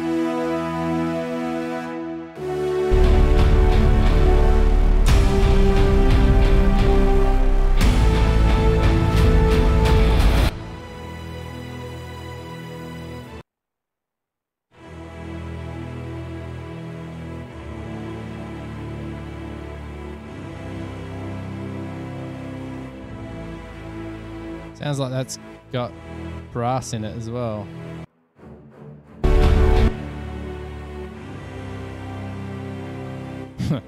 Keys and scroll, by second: 13.6 space, 14.1 space.